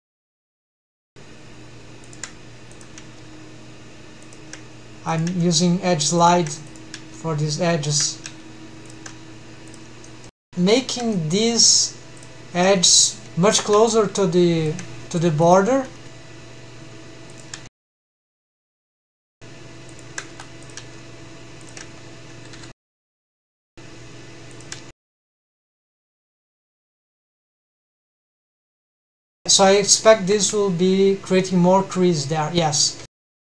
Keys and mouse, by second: 0.5 click, 0.6 shift+v, 1.8 shift+click, 2.5 click, 2.9 shift+v, 4.0 shift+click, 4.9 click, 5.3 shift+v, 6.0 shift+click, 6.5 click, 6.9 shift+v, 7.6 shift+click, 7.9 g, 9.5 click, 9.8 shift+middle click, 10.4 shift+v, 12.0 click, 12.5 shift+v, 14.3 shift+click, 14.9 click, 15.3 shift+v, 17.1 shift+click, 18.1 shift+v, 20.1 1, 20.4 click, 20.8 shift+v, 21.4 shift+click, 22.3 2, 22.9 click, 23.4 shift+v, 24.3 shift+click, 24.9-25.4 middle drag, 26.2 shift+v, 26.8 shift+click, 28.5 1, 28.7 click, 29.2 g, 31.6 middle click, 32.0 Tab.